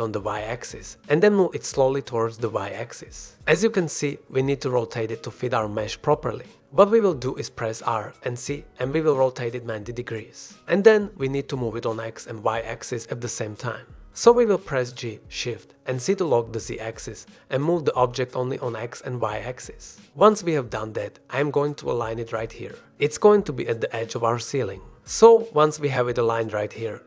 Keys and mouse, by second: 0.1-0.5 middle drag, 0.7 shift+click, 2.9-3.9 shift+drag, 7.5 r, 8.4 z, 9.9 KP_9, 10.3 KP_0, 10.8 Return, 11.8 g, 13.6 g, 15.1 g, 17.6 g, 18.6 shift+z, 20.0 click, 21.2 click, 21.7 click, 22.7 click, 25.3 g, 25.4 z.